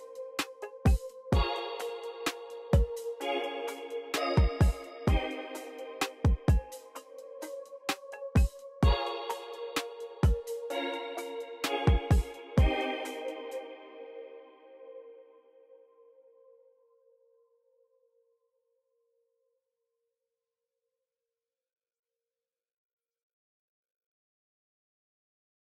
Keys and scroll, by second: 4.3 v, 4.9 x, 6.6 alt+super+s, 7.5-12.2 typing, 14.1 b, 21.6 typing, 22.9 x.